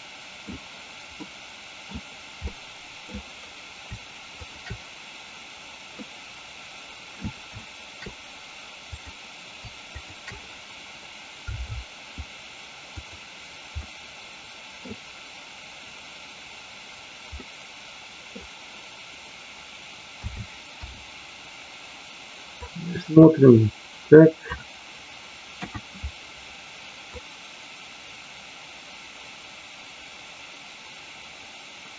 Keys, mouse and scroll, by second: 1.2 middle click, 2.5 middle click, 4.4 shift+click, 5.9-7.2 middle drag, 9.8 shift+click, 12.9 click, 13.8-14.8 middle drag, 17.3-18.3 middle drag, 22.6-24.5 drag, 25.5 KP_1, 27.0-31.9 drag.